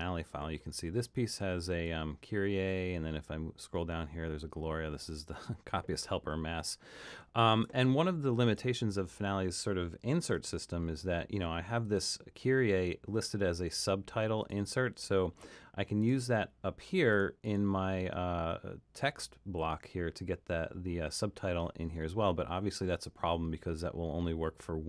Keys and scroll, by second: 10.4 super+k.